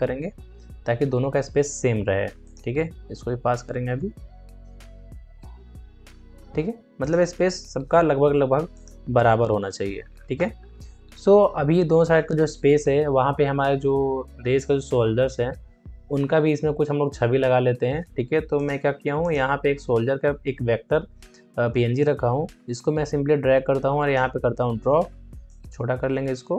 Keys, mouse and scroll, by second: 2.3 ctrl+click, 3.1 Left, 6.9 click, 8.6 click, 10.0 alt+scroll down 1, 10.5-11.0 scroll up 2, 18.5 alt+scroll up 1, 22.2-26.5 drag.